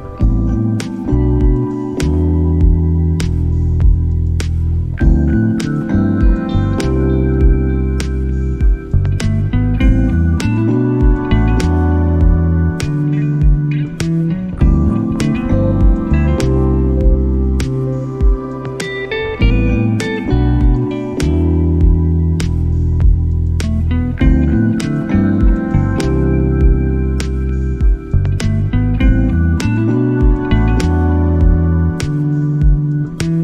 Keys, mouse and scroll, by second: 0.0 click, 1.5 click, 2.1 shift+a, 4.1 drag, 4.8 click, 6.3 middle click, 6.8-7.2 drag, 7.8-9.0 drag, 9.2-11.0 drag, 16.5 middle click, 17.4-18.9 drag, 19.8-20.9 drag, 21.9-26.0 drag.